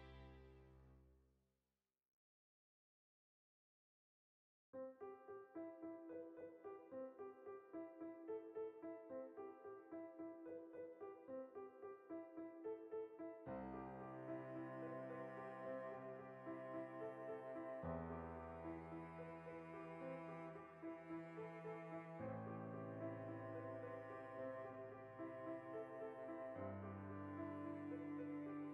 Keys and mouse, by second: 0.2 right click, 0.5 alt+q, 0.7-5.9 ctrl+shift+middle drag, 2.0 s, 5.2 g, 5.9 click, 6.2-7.3 ctrl+middle drag, 6.9 g, 7.3 click, 7.4 shift+middle click, 7.7-9.2 alt+right drag, 9.2 r, 10.4 ctrl+KP_Add, 11.3 alt+q, 11.5 ctrl+shift+middle click, 12.0 r, 12.5 click, 12.6 g, 13.2 click, 13.3-14.3 middle drag, 14.3 right click, 14.6 l, 14.7 middle click, 15.2 g, 16.1 click, 16.2 r, 16.9 click, 17.0 middle click, 17.7 alt+o, 18.6 middle click, 19.3 g, 19.6 click, 19.9 middle click, 19.9 g, 20.5 click, 20.5-21.8 middle drag, 21.8 alt+right click, 22.4 ctrl+KP_Add, 23.8-24.9 middle drag, 24.2 g, 24.9 click, 25.3 2, 25.6 alt+shift+right click, 26.5 ctrl+KP_Subtract, 27.4 g, 28.2 shift+click, 28.3-28.7 middle drag.